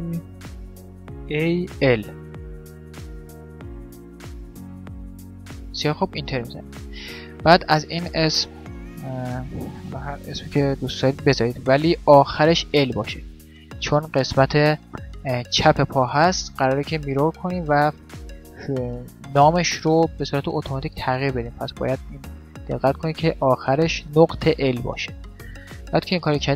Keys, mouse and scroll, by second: 7.6-9.5 drag.